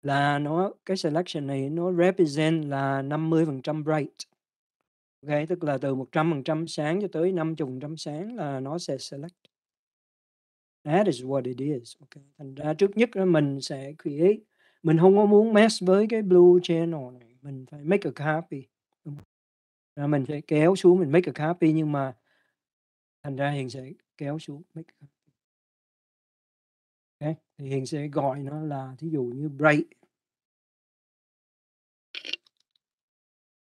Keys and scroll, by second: 32.1-33.6 typing.